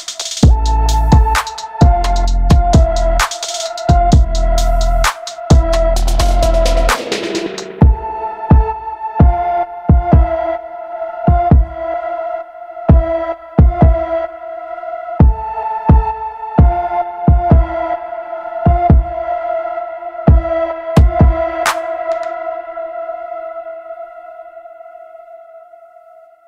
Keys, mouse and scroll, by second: 0.6-1.1 scroll down 3, 1.1 shift+middle click, 1.2 l, 1.4 shift+middle click, 1.5 a, 1.6 shift+middle click, 1.7 a, 2.5 shift+middle click, 2.5 a, 2.9 middle click, 3.1-3.5 scroll up 3, 3.5 shift+middle click, 3.7 g, 3.9 shift+middle click, 4.0 a, 4.8 scroll down 3, 4.8 shift+middle click, 5.8-7.0 typing, 5.8 shift+middle click, 6.4 shift+middle click, 6.7 shift+middle click, 7.0 shift+middle click, 9.1 shift+middle click, 9.2-10.9 typing, 9.3 shift+middle click, 9.5 shift+middle click, 9.8 shift+middle click, 10.0 shift+middle click, 10.1 shift+middle click, 10.8 shift+middle click, 12.9 middle click, 13.1 g, 13.3 shift+middle click, 13.4 s, 13.6 shift+middle click, 13.7-14.0 scroll down 1, 14.0 shift+middle click, 14.1 a, 14.3 shift+middle click, 14.4 click, 14.8 click, 15.7 click, 15.8 middle click, 15.9 click, 16.1 middle click, 16.2 a, 16.3 click, 16.3 a, 16.6 middle click, 16.6 scroll down 3, 16.8 middle click, 17.1 shift+middle click, 17.1 Tab, 17.8 click, 18.0 shift+middle click, 18.3 scroll down 2, 18.4 ctrl+s, 18.5 middle click, 18.7 click, 18.7 f, 18.8 middle click, 18.9 click, 19.1 middle click, 19.1 click, 19.3 shift+middle click, 19.3 scroll up 1, 19.4 drag, 19.5 middle click, 19.6 click, 19.7 scroll down 1, 19.7 middle click, 19.8 click, 20.0 middle click, 20.0 scroll up 1, 20.1 click, 20.3 middle click, 20.4 click, 20.6 middle drag, 20.7-21.1 scroll up 2, 20.8 click, 20.9 middle click, 21.1 click, 21.3 scroll down 3, 21.4 middle click, 21.4 scroll up 2, 21.5 click, 21.6 shift+middle click, 21.7 click, 21.9 scroll down 1, 21.9 middle click, 22.0 click, 22.1 scroll up 2, 22.1 middle click, 22.4 drag, 22.6 middle click, 22.7 click, 22.9 shift+middle click, 23.1 click, 23.2 middle click, 23.3 f, 23.4 click, 23.6 middle click, 23.8 scroll up 2, 23.8 click, 23.9 middle drag, 24.0 f, 24.1 drag, 24.2 middle drag, 24.4 click, 24.5 middle click, 24.7 click, 24.9 scroll down 2, 24.9 middle click, 25.2 scroll up 1, 25.3 click, 25.5 scroll down 1, 25.5 middle drag, 25.6 click, 25.9 middle click, 26.4 scroll up 3.